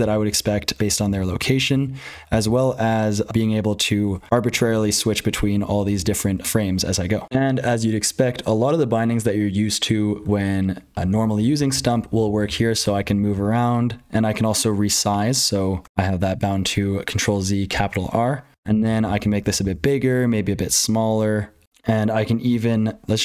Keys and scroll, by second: 0.0-23.2 typing, 0.3 super+l, 0.5 super+j, 0.8 super+h, 1.0 super+l, 1.3 super+j, 1.5 super+j, 2.1 super+k, 2.3 super+k, 2.4 super+k, 3.4 super+Tab, 3.8 super+Tab, 3.9 super+Tab, 4.4 super+Tab, 4.7 super+Tab, 5.2 super+Tab, 5.4 super+Tab, 5.6 super+Tab, 5.7 super+Tab, 5.9 super+Tab, 6.2 super+Tab, 6.4 super+Tab, 7.2 F12, 11.1 super+l, 11.3 super+j, 11.7 super+j, 12.0 super+k, 12.2 super+k, 12.4 super+k, 12.6 super+j, 12.8 super+j, 13.0 super+j, 13.1 super+j, 13.3 super+j, 13.6 super+h, 14.8 ctrl+z.